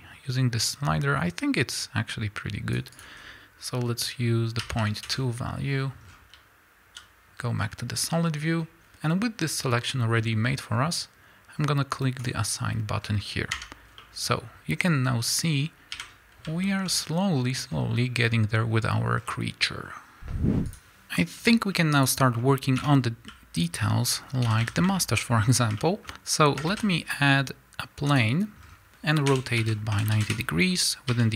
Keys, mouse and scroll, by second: 5.1 KP_Enter, 6.1 scroll down 1, 7.0 z, 7.5 scroll down 1, 7.6-12.2 middle drag, 10.2 scroll up 1, 12.2 click, 13.0 scroll down 1, 13.6 Tab, 13.8 scroll down 1, 14.0-15.2 middle drag, 15.2-15.9 scroll up 2, 15.9 KP_1, 16.7-20.2 shift+middle drag, 16.9-18.2 scroll up 2, 18.2-19.2 scroll down 2, 19.2-19.9 scroll down 1, 19.9 scroll down 1, 20.8-22.1 drag, 22.3 scroll up 1, 22.8 Tab, 23.3 z, 24.0 scroll up 1, 24.4 a, 24.9-31.3 shift+middle drag, 25.2 scroll up 1, 26.1-26.7 scroll up 1, 26.7 shift+a, 28.6 scroll down 1, 29.3 r, 30.3 KP_Enter, 31.1 s.